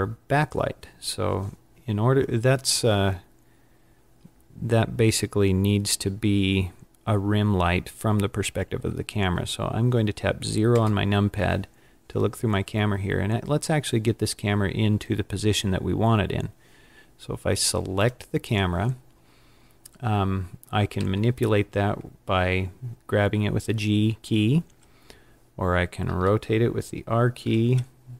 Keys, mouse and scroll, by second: 10.7 KP_0, 17.9 click, 20.9 g, 20.9 g, 26.0 r.